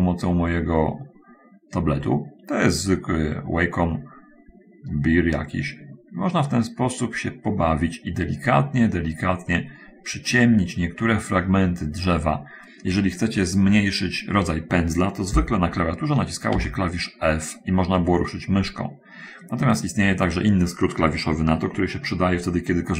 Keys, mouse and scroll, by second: 0.6-7.8 drag, 8.0-9.1 drag, 9.3-12.7 drag, 16.8 f, 19.9 Escape.